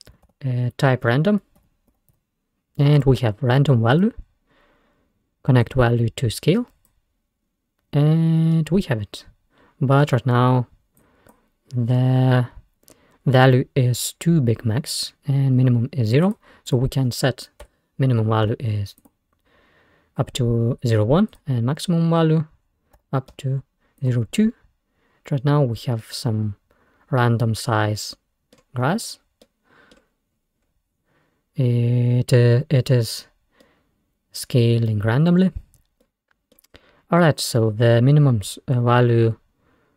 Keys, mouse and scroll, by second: 4.3-4.9 scroll up 5, 5.7-7.1 drag, 7.6-8.6 scroll down 5, 8.6-11.0 middle drag, 11.0 click, 11.8-12.6 scroll up 6, 16.3-19.0 drag, 21.4-24.2 drag, 24.7-26.0 scroll up 4, 26.0-29.3 middle drag, 29.3 scroll down 2, 29.5 middle click, 30.4-31.3 scroll up 5, 33.5 scroll down 2, 33.6-39.9 middle drag.